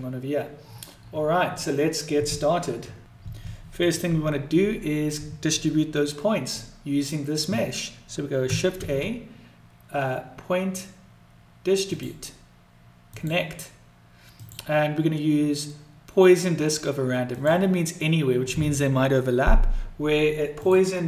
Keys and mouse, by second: 3.7 click, 8.6 s, 14.3-17.4 drag, 20.6 click.